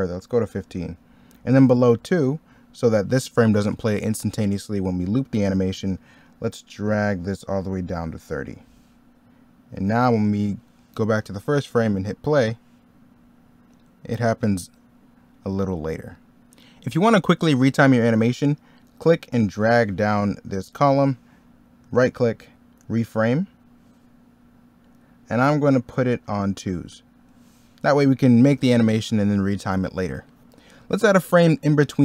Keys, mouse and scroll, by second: 21.8 right click, 30.3 middle click.